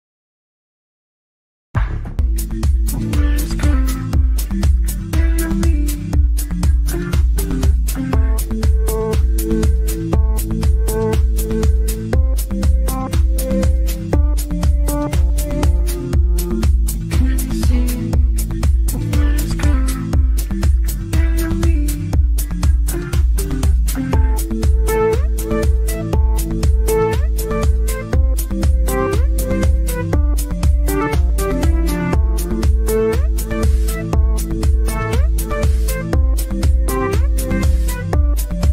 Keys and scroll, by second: 33.3 Delete, 37.3 Delete.